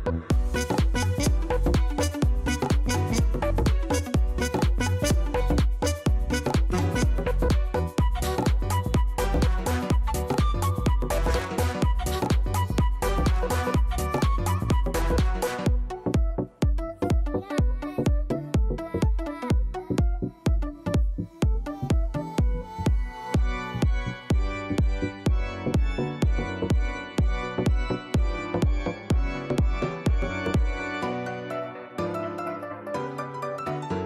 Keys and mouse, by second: 0.7 click, 1.0 alt+click, 1.8 alt+click, 2.8 alt+click, 5.4 click, 7.3 click, 8.2 click, 9.1 alt+click, 12.2-13.5 alt+drag, 14.0 alt+middle click, 14.6 alt+click, 15.4 alt+click, 17.6 ctrl+z, 17.8 click, 20.9 ctrl+right click, 22.4 click, 24.2 click, 27.0 click, 28.6 click, 29.2 click, 31.0 click.